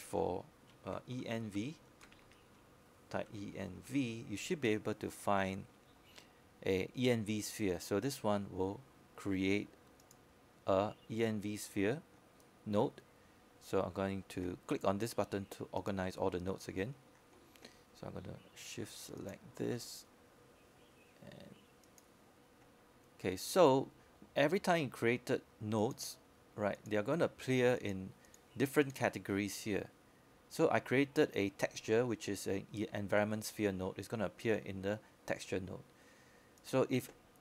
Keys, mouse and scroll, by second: 0.1-1.7 scroll up 1, 1.7 click, 2.9-6.4 typing, 12.2 click, 13.6 scroll down 1, 14.4-15.3 scroll up 1, 15.3-18.1 scroll down 1, 18.1 click, 19.2-19.5 scroll down 1, 21.6 shift+click, 24.3 click.